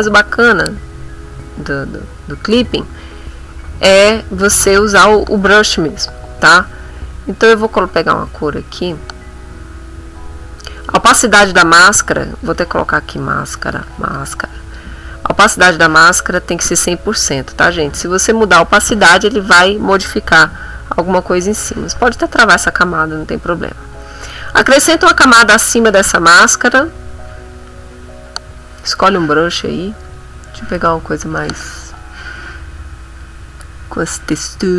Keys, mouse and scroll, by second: 6.0 click, 7.9 click, 8.9-10.8 drag, 11.9 click, 12.9-14.7 typing, 21.8 click, 24.2 click, 28.2 middle click, 30.0 click, 33.6 click.